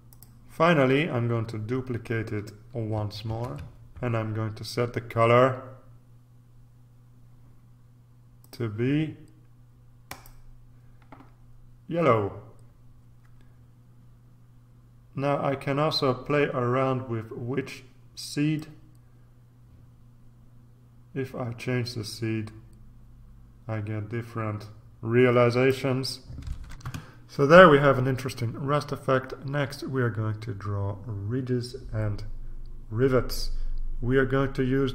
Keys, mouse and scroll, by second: 0.1 click, 3.2 ctrl+d, 8.4 click, 10.1 click, 18.6-26.2 drag, 26.9 ctrl+r.